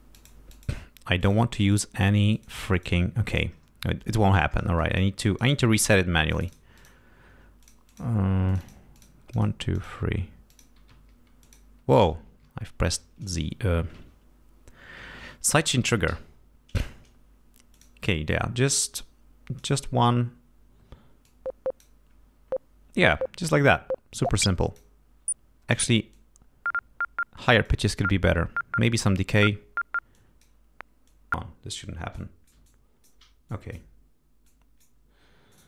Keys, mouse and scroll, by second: 0.1 click, 0.4 click, 1.2 click, 1.5 click, 2.3 click, 2.7 click, 4.8 click, 5.2 click, 9.3 click, 9.7 click, 10.4 click, 10.8 y, 11.4 click, 12.2 shift+y, 16.0 l, 17.7 click, 18.6 click, 19.5 click, 21.2 click, 24.2 click, 26.1-27.8 drag, 30.1 click, 31.0 click, 32.1-33.2 drag, 33.4 alt+click, 34.4 click, 35.5 click.